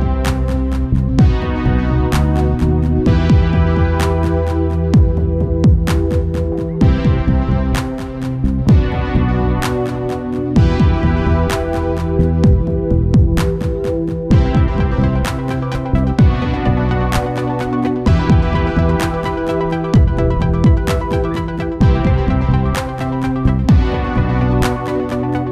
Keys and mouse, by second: 1.5 g, 6.2 g, 9.2 Tab, 10.3-12.0 drag, 11.2 ctrl+s, 12.0 Tab, 12.7 a, 13.0 a, 14.1 g, 17.1 ctrl+z, 18.0 g, 19.4 ctrl+z, 20.7 click, 22.4 right click, 24.0 g.